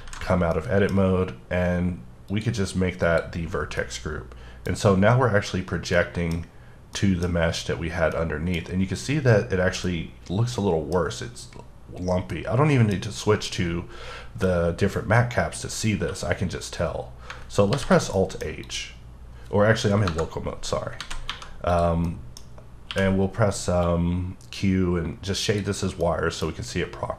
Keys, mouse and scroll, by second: 0.2 z, 0.5 middle click, 2.3 click, 3.0 click, 3.8 middle click, 4.7 scroll down 1, 5.9 middle click, 7.0 middle click, 7.9 scroll up 1, 8.1 middle click, 8.6 scroll down 1, 9.8 middle click, 11.3-12.3 scroll up 1, 12.3 middle click, 14.5 middle click, 16.0 q, 17.7 alt+h, 18.1 middle click, 18.6 click, 20.1 KP_Divide, 21.0 alt+a, 21.3 1, 21.7 click, 22.0 middle click, 22.9 q, 23.8 click, 26.0 middle click.